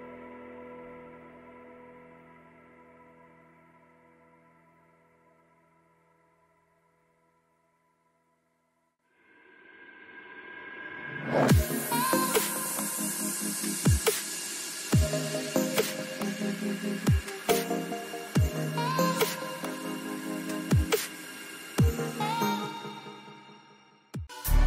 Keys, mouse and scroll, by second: 0.1 a, 0.3 a, 1.8 ctrl+r, 6.4 a, 6.9-8.3 middle drag, 8.3-9.3 right drag, 9.1 click, 10.3 middle click, 13.4-15.9 middle drag, 17.6-19.4 middle drag, 18.1 a, 19.5 click, 21.9-24.2 drag.